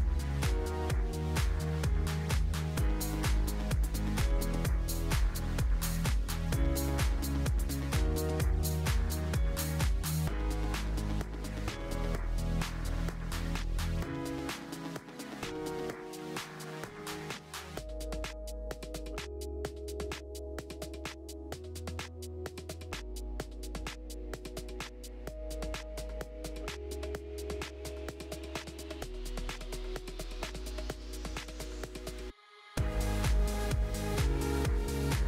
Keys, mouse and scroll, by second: 3.4 Tab, 4.0 a, 4.2 s, 5.9 Tab, 7.4 drag, 8.2-13.5 drag, 13.8-14.9 drag, 14.9 KP_0, 17.3 click, 18.2-18.6 scroll down 1, 18.6 click, 18.9 scroll up 6, 19.1-19.5 scroll down 3, 19.5 click, 21.5 alt+h, 21.9 click, 22.1 click, 23.2 click, 23.5-24.2 scroll down 1, 24.2 g, 25.4-26.1 scroll up 1, 26.1-29.4 drag, 29.4 g, 32.8 s, 34.5 g.